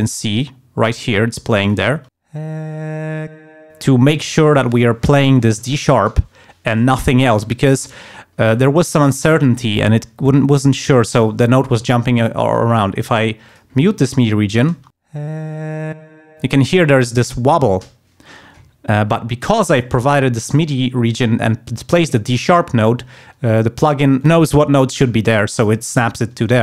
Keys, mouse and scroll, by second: 0.3 click, 1.6 click, 1.9 space, 3.4 space, 13.5 click, 13.9 alt+1, 14.7 space, 16.0 space, 19.5 click, 20.4 alt+1.